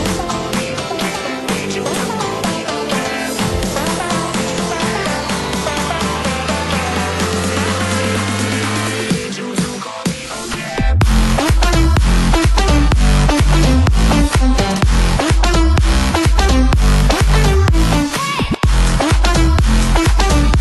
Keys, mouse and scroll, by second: 0.1 e, 1.1 click, 1.5 e, 2.8 e, 3.7 e, 4.5 e, 5.7 middle click, 5.9 click, 5.9 middle click, 7.2 e, 8.1 e, 9.1 e, 10.1-11.4 middle drag, 12.1 click, 12.8 click, 14.1 click, 15.1 ctrl+z, 15.4 click, 16.9 right click, 17.8 click, 20.3 click.